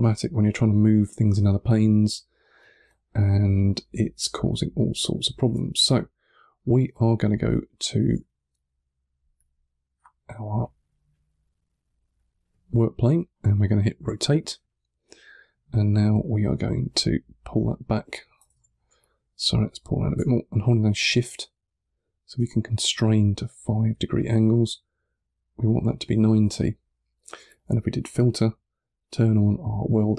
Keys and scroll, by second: 5.6 1, 6.8 3, 13.9 r, 18.4 super+z, 18.8 3, 26.4 3.